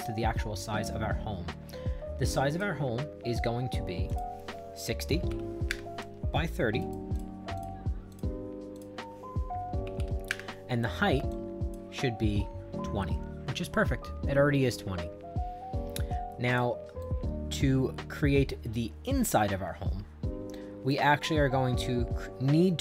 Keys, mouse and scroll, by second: 2.5 click, 4.1 click, 4.8-5.8 typing, 6.8 click, 7.1 click, 7.5 click, 8.1 click, 8.7 click, 9.6-10.4 typing, 11.3 click, 16.5 click, 17.0-18.1 right drag, 19.2-20.5 middle drag, 20.5 right click.